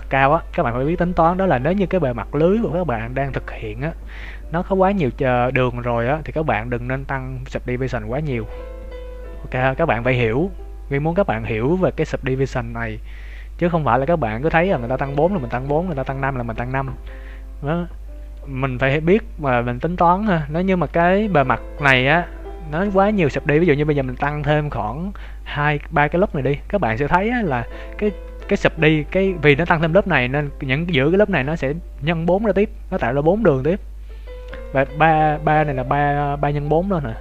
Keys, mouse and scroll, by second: 1.5 Tab, 19.3 Tab, 20.4-20.8 scroll up 1, 20.8 Tab, 21.7-22.6 scroll down 2, 24.1 ctrl+r, 26.7 Tab, 27.1 middle click, 27.9 scroll up 1, 28.1 Tab, 29.0 KP_7, 29.8-30.1 scroll up 3, 30.1 shift+middle click, 34.6 shift+middle click.